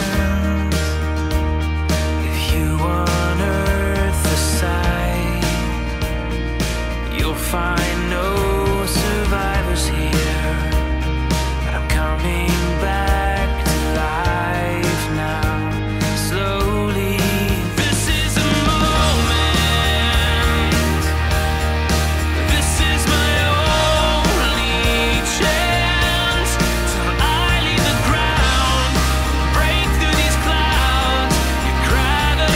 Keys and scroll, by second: 1.7 super+z, 2.4 super+z, 2.7 scroll, 3.5 scroll, 6.8 super+z, 7.4 scroll, 11.6 super+z, 11.9 super+z, 12.3 super+z, 12.4-13.4 scroll, 14.0 scroll, 14.8-15.3 scroll, 18.8 super+z, 19.7 super+z, 21.2 super+z, 23.7 super+z, 24.9-25.4 scroll, 26.3-26.7 scroll, 27.7-28.1 scroll.